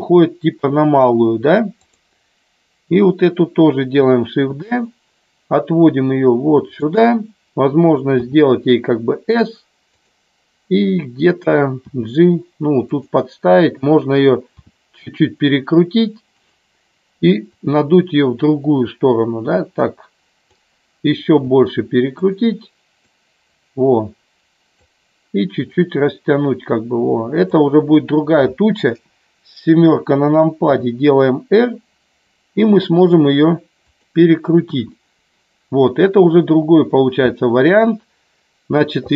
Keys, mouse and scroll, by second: 1.8 click, 4.4 shift+d, 6.7 click, 8.2 s, 10.0 click, 11.8 g, 12.8 click, 14.6 r, 16.3 click, 17.4-20.6 drag, 21.3 r, 23.1-24.7 drag, 25.7-27.5 drag, 28.8 KP_7, 30.6 r, 33.8 click, 34.6 KP_1.